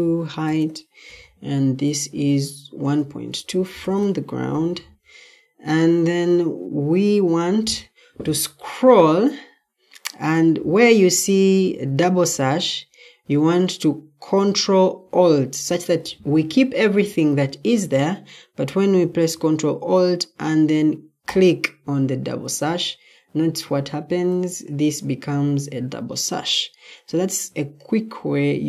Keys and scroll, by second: 0.0-1.0 typing, 3.2-4.3 typing.